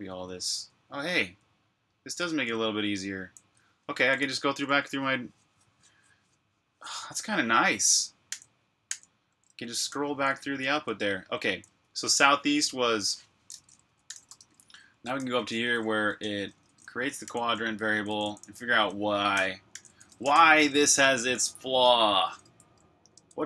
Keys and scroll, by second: 0.4 typing, 2.9-5.1 typing, 7.8-11.5 typing, 13.8-20.7 typing, 23.1 ⟲.